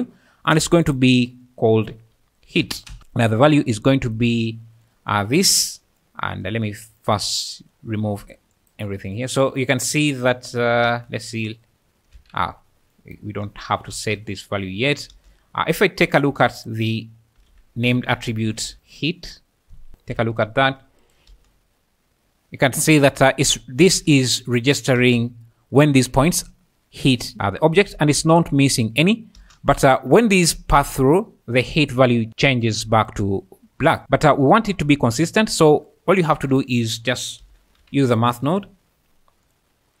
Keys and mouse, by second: 0.5 click, 1.0-2.9 drag, 3.2 click, 4.9 click, 6.0 click, 7.0 click, 10.5 shift+click, 10.9 space, 12.2 Escape, 13.9 space, 15.1 space, 16.3 shift+a, 18.8-19.9 drag, 19.9 ctrl+shift+click, 21.1 shift+click, 21.3 space, 23.9 space, 25.0 space, 25.1 `, 27.3-28.0 `, 28.1 space, 29.4 space, 30.0 `, 31.3-40.0 typing, 34.3 click.